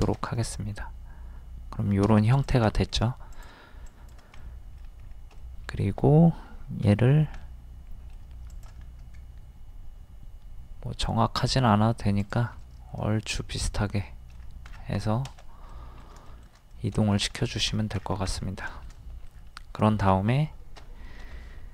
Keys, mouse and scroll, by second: 0.2-2.4 middle drag, 2.4 click, 2.7 middle click, 3.3 click, 4.4 middle click, 5.1-5.4 scroll up 1, 5.4-6.5 middle drag, 6.8 m, 7.4-8.5 middle drag, 12.6 middle click, 14.4 scroll down 1, 15.7 middle click, 16.3 shift+middle click, 17.7-18.1 scroll down 1, 19.0 middle click, 19.3 scroll down 1, 20.3 shift+middle click, 21.3 m.